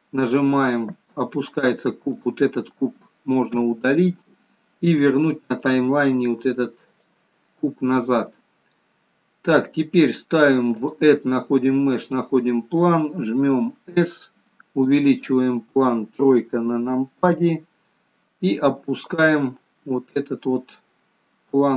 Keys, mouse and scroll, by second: 1.4 space, 2.7 click, 4.0 Delete, 6.0 click, 11.3 click, 14.3 s, 17.7 KP_3, 19.6 click, 21.0 click.